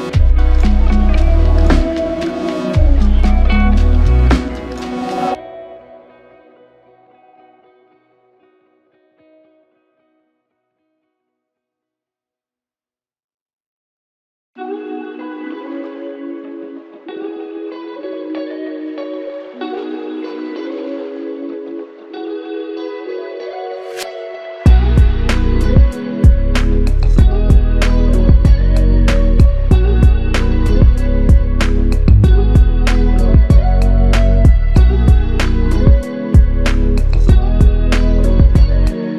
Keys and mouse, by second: 0.6 double click, 7.8 alt+click, 12.5 alt+click, 14.8 double click, 29.7 f, 31.0 double click.